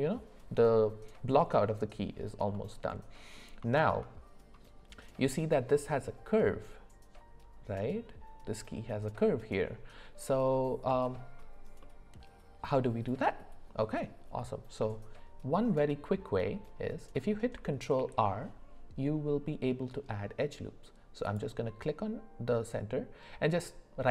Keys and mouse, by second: 2.5 middle click, 3.7 shift+middle click, 11.8 middle click, 17.9 ctrl+r.